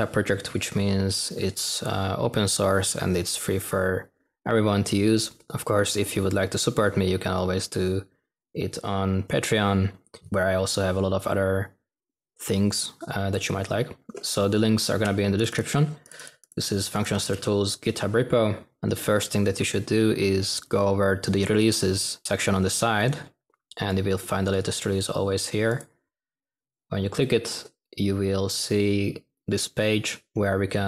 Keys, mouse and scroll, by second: 9.1 typing, 17.4-18.0 scroll up 1, 20.6 typing.